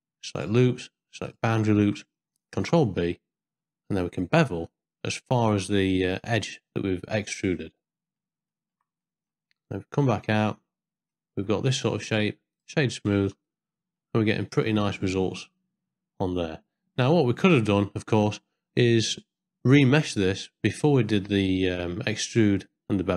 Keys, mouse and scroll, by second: 2.6 ctrl+b, 7.8 ctrl+click, 8.6 ctrl+click, 9.0 click, 10.4 Tab, 11.1 middle click, 12.0 right click, 13.1 ctrl+middle click, 13.5 middle click, 14.4 ctrl+middle click, 14.9-16.8 middle drag, 17.2 ctrl+middle click, 17.7 shift+middle click, 21.1 middle click.